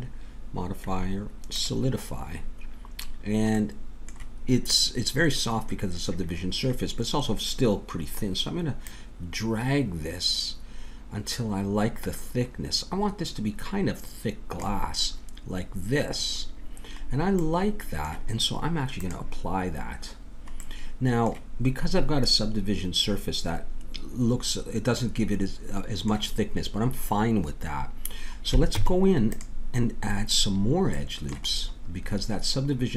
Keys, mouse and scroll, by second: 3.5-5.4 middle drag, 8.9-10.6 drag, 17.0 middle click, 18.9-20.8 drag, 28.7 Tab, 32.2 middle click.